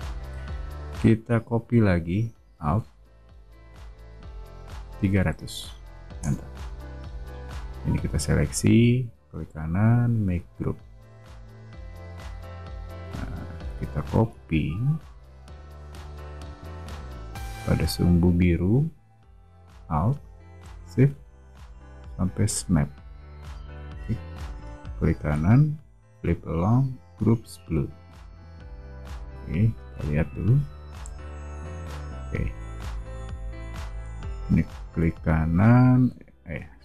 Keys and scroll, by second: 0.3 p, 4.9-6.8 typing, 6.2 Return, 14.2 m, 29.4 o.